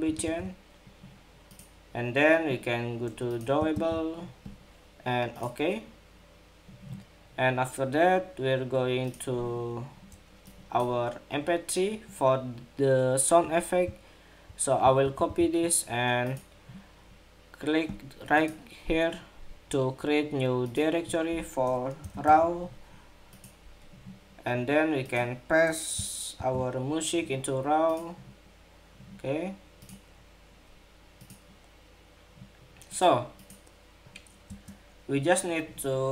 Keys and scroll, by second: 3.4 super+v, 14.7 super+c, 15.0 super+c, 26.1 super+v.